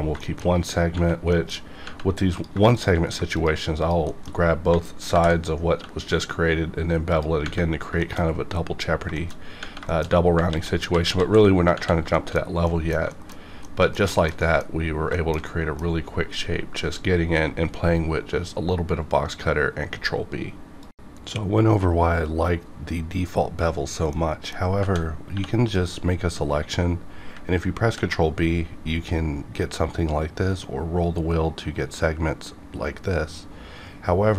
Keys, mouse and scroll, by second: 0.2 shift+middle click, 0.5 scroll down 1, 1.3 middle click, 1.6 scroll up 1, 2.4 click, 2.7 shift+click, 3.3 shift+click, 4.1 shift+middle click, 4.3-4.7 shift+scroll up 2, 5.1 ctrl+b, 5.9-7.1 scroll up 1, 7.1 click, 7.4 Tab, 7.6 scroll down 1, 8.0 shift+middle click, 8.2 scroll down 1, 9.0 scroll down 1, 9.1 shift+middle click, 9.5 scroll up 2, 9.9 shift+middle click, 10.1 shift+scroll up 3, 10.5 ctrl+z, 11.5 scroll down 2, 12.1 shift+middle click, 12.3 scroll down 1, 12.7 middle click, 13.1 shift+middle click, 13.3 scroll down 1, 13.6 middle click, 13.9 scroll down 1, 14.1 shift+middle click, 14.7 scroll up 1, 15.1-18.3 shift+middle drag, 25.4 KP_2, 25.7 click, 27.8 ctrl+b, 30.4-30.9 scroll up 1, 32.7 scroll up 1, 33.4-34.1 scroll down 1.